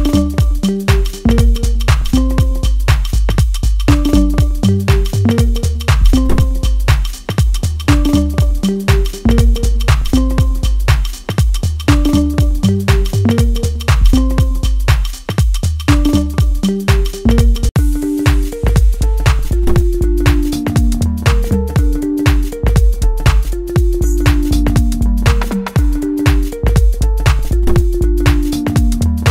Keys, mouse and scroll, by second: 3.5-6.3 middle drag, 6.3 click, 8.6-10.9 middle drag, 10.9-12.4 drag, 12.4-15.9 middle drag, 15.9-16.3 scroll up 1, 16.3-20.5 middle drag, 20.5 click, 21.6-25.8 middle drag, 25.8 scroll down 1, 25.9-26.6 scroll up 1, 26.6-29.3 middle drag.